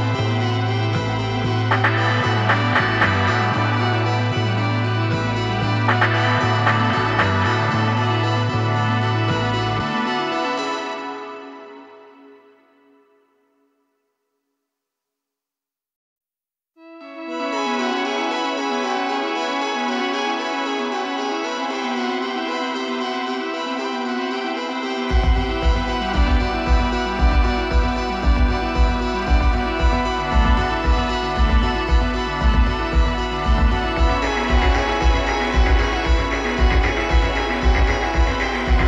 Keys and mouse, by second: 10.6-12.5 drag, 14.3-16.7 middle drag, 18.9-22.0 drag, 25.4-27.0 drag, 31.2-32.9 drag, 37.4-38.8 drag.